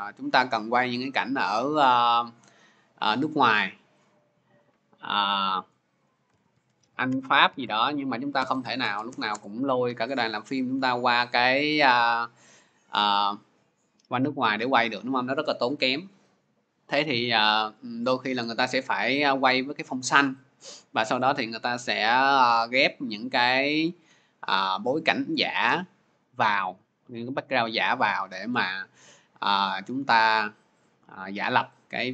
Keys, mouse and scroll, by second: 0.5-0.8 scroll, 5.8 click, 5.9-9.4 typing, 8.2-10.4 drag, 10.4 typing, 11.6-12.8 typing, 12.6-17.7 drag, 23.9 click, 24.2 click, 28.4 click, 31.2 click.